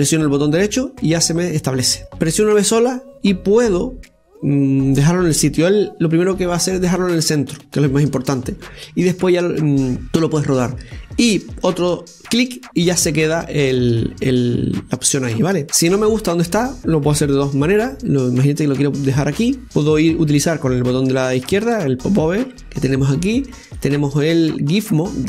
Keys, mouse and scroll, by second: 2.0 ctrl+r, 14.8 click, 15.2-17.9 middle drag, 18.0 KP_7, 24.5 click.